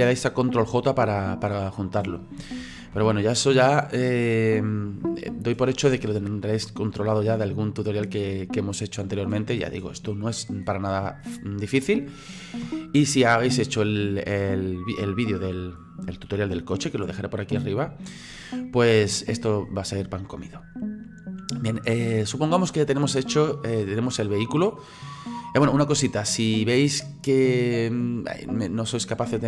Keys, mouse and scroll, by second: 2.6 ctrl+z, 3.0 ctrl+z, 3.6-6.7 middle drag, 7.9-26.8 middle drag.